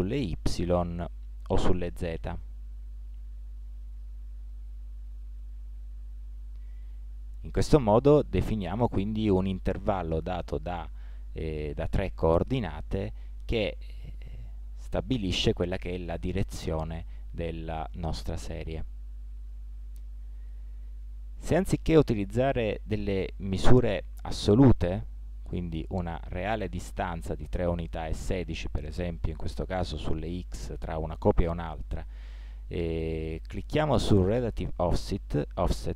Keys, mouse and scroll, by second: 2.3-4.0 drag, 4.5-9.0 middle drag, 16.4-19.7 middle drag, 28.8-30.9 middle drag, 33.7-35.9 drag.